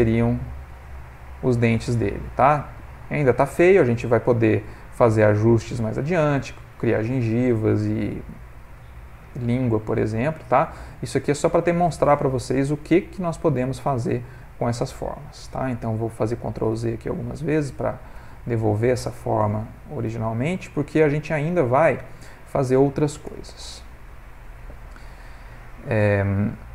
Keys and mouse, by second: 0.5 Tab, 1.0 middle click, 1.9 ctrl+middle click, 2.3 middle click, 10.4 ctrl+middle click, 11.0 middle click, 14.5 middle click, 16.6 ctrl+z, 17.2 ctrl+z, 17.8 ctrl+z, 18.4 ctrl+z, 19.1 ctrl+z, 19.7 ctrl+z, 20.4 ctrl+z, 20.9 ctrl+z, 21.4 ctrl+z, 22.2 ctrl+middle click, 22.8 middle click, 23.7 Tab, 24.1 ctrl+middle click, 24.7 ctrl+middle click, 24.8 middle click, 26.2 ctrl+middle click, 26.6 shift+middle click.